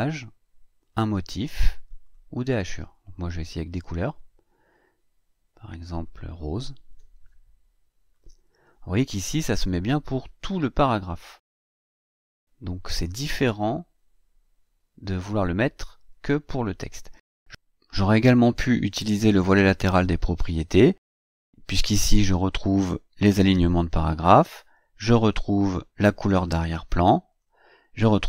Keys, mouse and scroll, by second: 0.6 click, 1.8 click, 3.4 click, 5.7 click, 7.9 click, 25.6 click, 27.2 click.